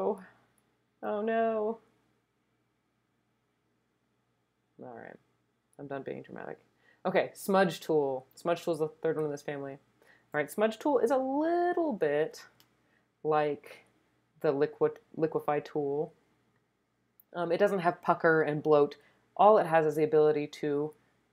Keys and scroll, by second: 11.0-11.9 typing.